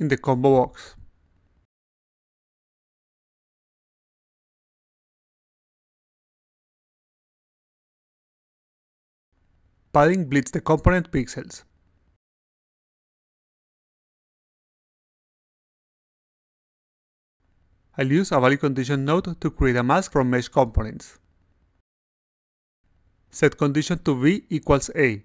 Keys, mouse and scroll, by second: 0.5 click, 1.1 click, 8.0 click, 9.5 click, 10.5 click, 11.0 click, 11.5 click, 12.0 click, 12.9 click, 13.3 click, 13.7 click, 14.0 click, 14.4 click, 16.5 click, 18.0 click, 20.4-21.6 drag, 21.9 click, 22.9 click.